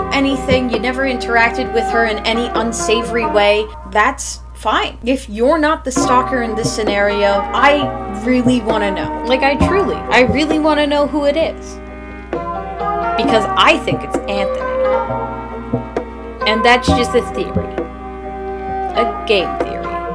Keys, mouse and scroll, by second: 7.3-8.5 typing, 9.5 p.